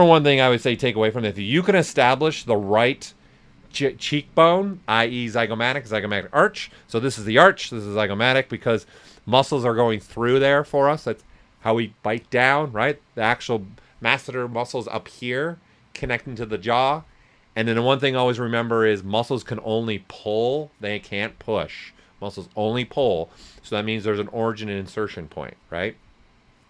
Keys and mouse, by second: 2.1 ctrl+right click.